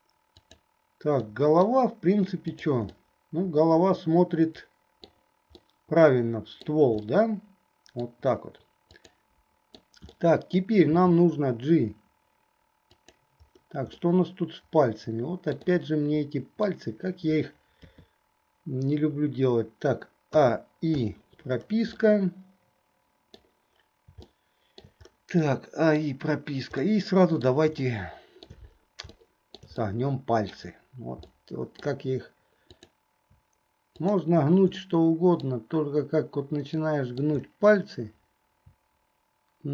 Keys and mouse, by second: 0.5 click, 1.4 middle click, 2.7 click, 3.0-5.3 middle drag, 5.7-7.0 middle drag, 7.3-8.3 middle drag, 9.2 click, 9.2 middle click, 10.3 middle click, 14.2-16.9 middle drag, 17.9 KP_3, 20.5 a, 21.3 i, 22.2-23.5 middle drag, 24.4 shift+middle click, 25.7 middle click, 27.0 middle click, 28.0 shift+middle click, 29.3 shift+middle click, 29.9 middle click, 31.4 middle click, 32.9 click, 34.1 shift+click, 34.9 middle click, 36.9 middle click.